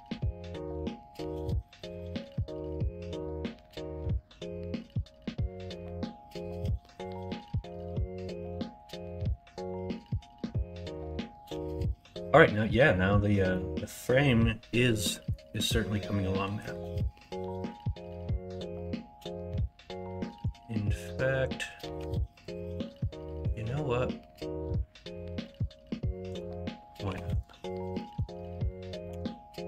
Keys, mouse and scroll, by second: 2.2-6.3 middle drag, 6.6 middle click, 7.3-8.7 middle drag, 9.1 middle click, 9.5 shift+middle click, 10.0 middle click, 15.1 middle click, 16.5 KP_3, 21.9 1, 27.0 2, 29.1 f.